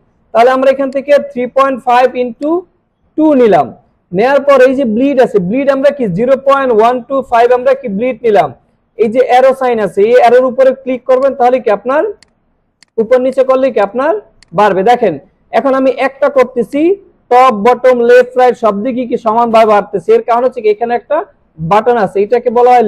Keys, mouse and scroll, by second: 0.8 click, 11.2 click, 12.2 click, 12.8 click, 13.3 click, 14.4 click, 16.7 click.